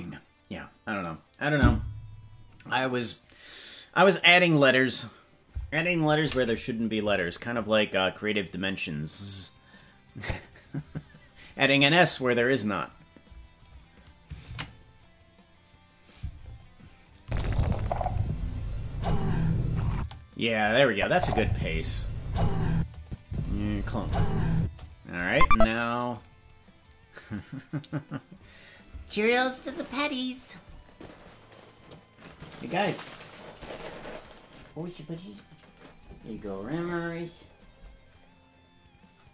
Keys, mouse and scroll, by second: 10.2 click, 16.7 ctrl+s, 17.2 space, 19.9 space, 20.9 click, 21.1 space, 22.7 space, 23.0 click, 23.2 space, 24.5 space, 25.4 ctrl+Tab.